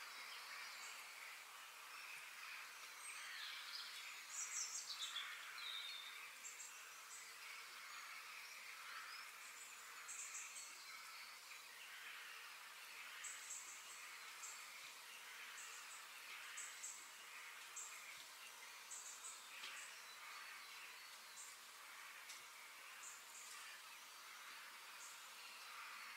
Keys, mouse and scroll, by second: 1.0 g, 3.3 click, 3.9 f, 23.1 g, 25.8 KP_1.